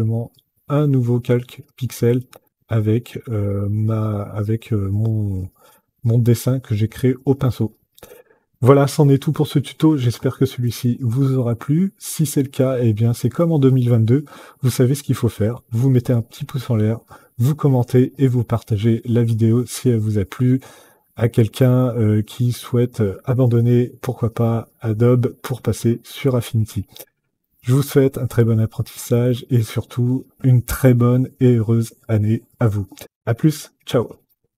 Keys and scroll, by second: 34.5 F10.